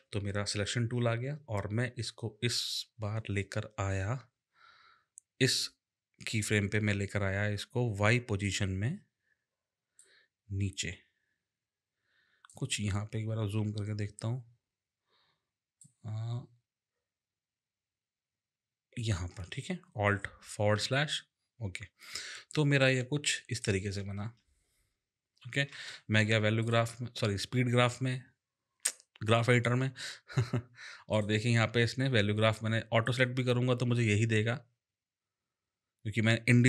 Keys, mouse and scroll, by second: 8.4 click, 10.0 click, 13.5-14.2 alt+scroll up 2, 14.2-15.7 alt+scroll up 1, 20.7 alt+/, 22.9 click, 24.1 space, 25.7 space, 26.6 click, 31.1 click, 33.1 click.